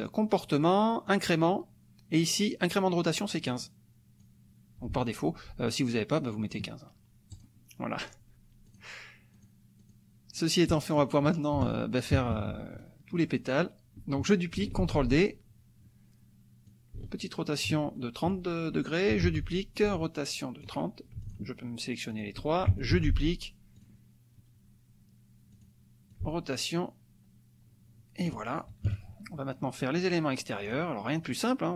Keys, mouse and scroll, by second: 1.1 click, 3.5 click, 4.3-6.7 drag, 7.3 click, 8.7 click, 9.3 click, 10.7 click, 11.6 KP_Add, 12.3 KP_Subtract, 13.1 click, 14.8 ctrl+d, 16.6-17.8 drag, 18.0 ctrl+click, 19.2 ctrl+d, 19.8-20.8 ctrl+drag, 21.2 shift+click, 22.1 shift+click, 22.9 ctrl+d, 23.8 click, 25.5 click, 26.1-28.4 ctrl+drag, 28.9 KP_Subtract, 30.7 click, 31.0 click.